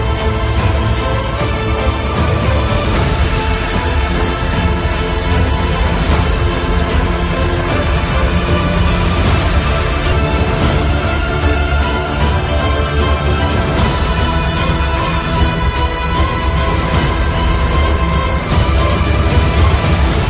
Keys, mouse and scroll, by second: 2.4-9.0 drag, 16.7-20.2 drag.